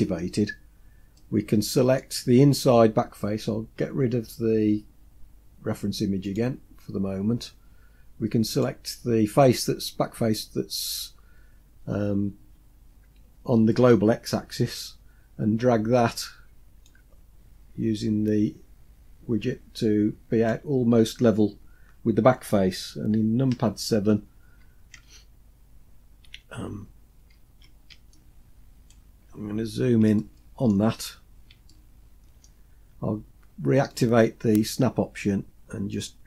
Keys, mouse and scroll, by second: 0.7 scroll down 2, 1.3 middle click, 2.4 scroll up 2, 6.3 click, 7.5-8.6 scroll up 2, 8.6 click, 8.6 scroll up 1, 12.7-13.6 scroll down 2, 13.6-14.3 scroll down 3, 14.3-15.0 scroll down 1, 15.0-15.6 scroll down 3, 16.9-20.7 drag, 23.6 KP_7, 28.2 shift+middle click, 29.2-30.1 scroll up 5, 30.3 shift+middle click, 31.0-31.8 scroll up 5, 31.8 shift+middle click, 34.0 click, 36.0-36.2 drag.